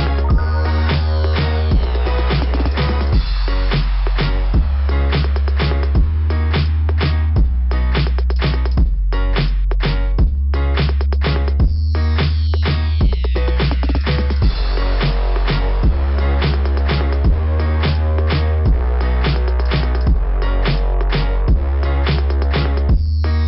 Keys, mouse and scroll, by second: 0.0 scroll down 2, 0.1 scroll up 2, 0.4 scroll down 2, 1.0 scroll up 1, 2.6-3.1 scroll up 4, 3.2-3.6 scroll down 2, 3.7 scroll up 1, 3.9 scroll down 2, 4.0 scroll up 2, 4.1 scroll down 1, 4.4 scroll up 1, 8.0 scroll up 1, 8.3 scroll down 1, 8.7 scroll up 1, 8.9 scroll down 1, 9.7-10.1 scroll up 2, 11.0 scroll up 1, 11.7-12.4 typing, 13.0 click, 16.1-18.0 typing, 19.0 click, 20.0-20.4 typing.